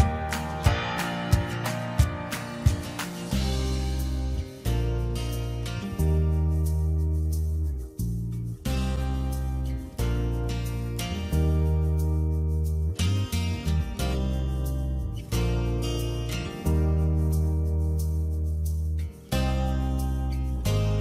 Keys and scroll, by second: 0.7 Return, 2.7 ctrl+j, 7.9 ctrl+j, 10.4 ctrl+z, 17.3 ctrl+j.